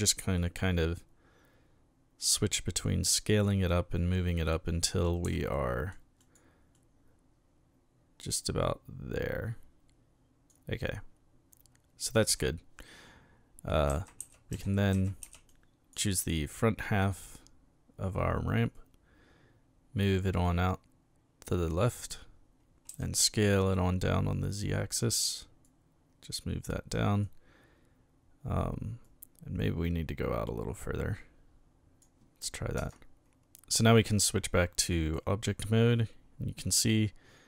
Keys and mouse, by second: 5.2 s, 5.5 middle click, 6.2 click, 6.7-10.5 drag, 12.3 a, 13.6-15.7 typing, 14.6 right click, 15.5 click, 18.7-21.7 drag, 22.9 s, 23.0 middle click, 24.9 click, 25.6-27.2 drag, 29.0-32.0 drag, 32.8 Caps_Lock, 35.1-37.4 middle drag.